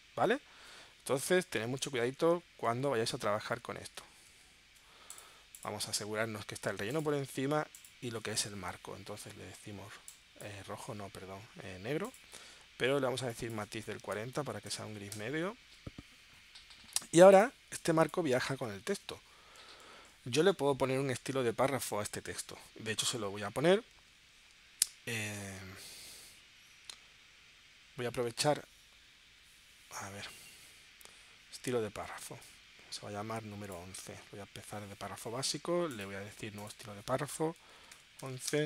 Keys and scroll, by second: 3.3 super+z, 14.1 4, 15.1 Return, 20.5 super+z, 37.8 1, 38.2 •, 38.5 space.